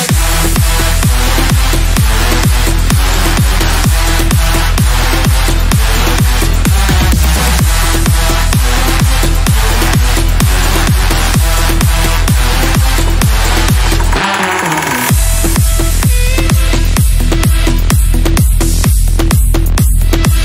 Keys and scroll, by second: 1.8 KP_Add, 10.7 ctrl+z, 11.6 shift+Page_Down, 15.8 c.